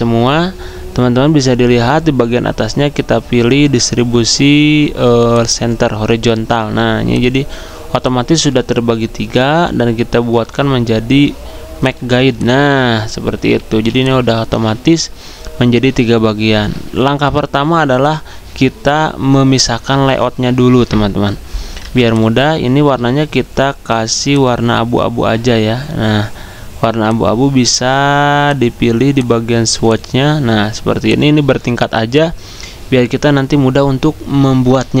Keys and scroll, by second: 13.7 z, 21.8 v.